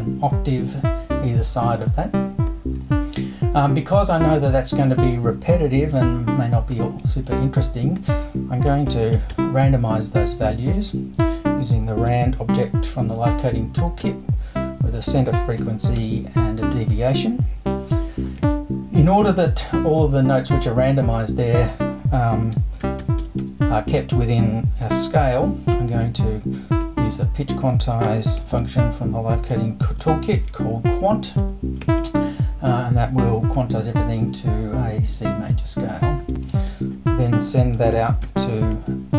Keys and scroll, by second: 6.9 super+i, 8.4-9.8 typing, 12.1 space, 13.6-14.5 typing, 15.6 space, 16.0 5, 18.4 super+i, 22.3-24.9 typing, 26.5-28.4 typing, 29.8-31.8 typing, 36.3 super+i, 37.3 super+s, 37.5-39.1 typing.